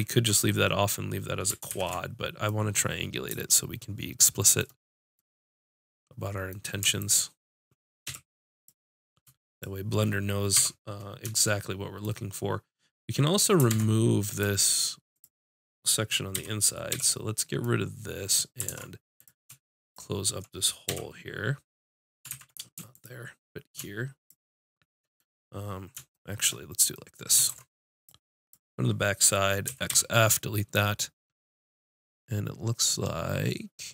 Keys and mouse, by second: 1.7 ctrl+shift+z, 7.2-8.8 drag, 8.1 f, 10.6 j, 13.7 ctrl+Tab, 16.4 x, 18.7 ctrl+Tab, 19.9-21.9 drag, 20.9 f, 22.3 ctrl+z, 22.9-25.2 drag, 27.5 ctrl+Tab, 28.5 click, 29.7 x.